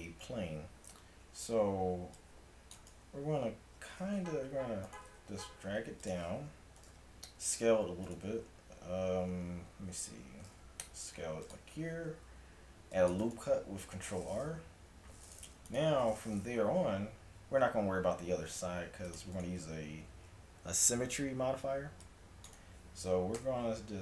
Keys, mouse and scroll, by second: 1.2 a, 1.5 a, 2.0 c, 4.2 g, 5.3 g, 6.9 s, 10.5 s, 12.1 ctrl+r, 15.3-17.7 drag, 18.6 ctrl+r, 20.1 a, 21.7 c, 23.4 e.